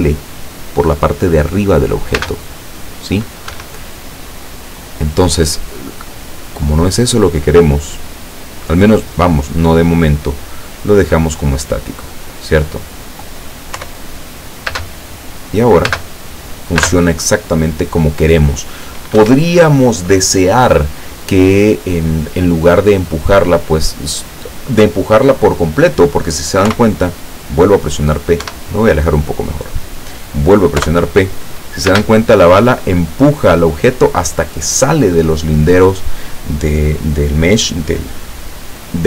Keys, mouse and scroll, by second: 2.2 space, 3.6 Escape, 6.7 click, 7.9 click, 9.2 click, 12.4 click, 13.8 p, 14.8 space, 15.9 space, 16.9 space, 19.3 Escape, 26.7 p, 28.6 Escape, 29.3-29.6 scroll down 2, 30.8 p, 32.0 space.